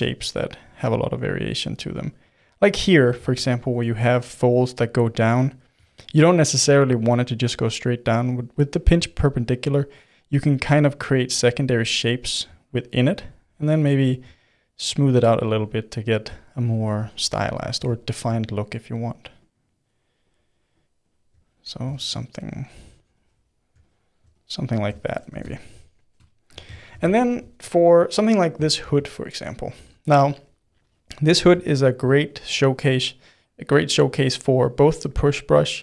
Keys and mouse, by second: 0.4-1.5 drag, 1.5 middle click, 2.2 click, 2.7 middle click, 3.1 ctrl+z, 3.4-7.6 middle drag, 7.6-11.7 drag, 11.7-13.0 middle drag, 13.0-14.4 shift+drag, 14.4 middle click, 14.8 click, 15.3-18.9 middle drag, 18.9-21.9 drag, 21.9 middle click, 22.3-25.5 drag, 25.5-35.8 ctrl+middle drag.